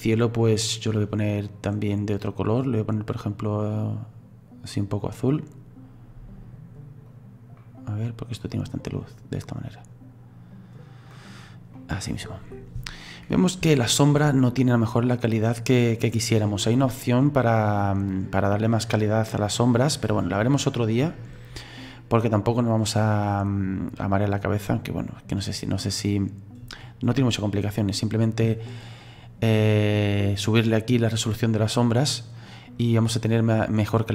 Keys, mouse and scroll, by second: 1.5 click, 11.8 middle click, 12.6 scroll up 3, 13.7-31.4 shift+middle drag, 31.4-34.1 drag.